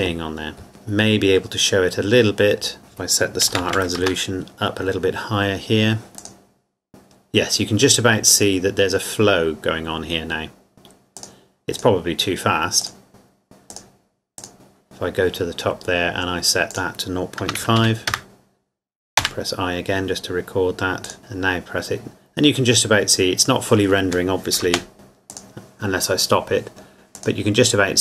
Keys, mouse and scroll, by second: 0.3-0.7 scroll down 1, 2.8 click, 3.5 KP_1, 3.6 KP_2, 3.8 KP_8, 4.0 KP_Enter, 6.1 click, 11.2 click, 16.7 click, 17.4 KP_0, 17.6 KP_Decimal, 17.8 KP_5, 18.2 KP_Enter, 21.1 click, 24.7 space, 24.9 click.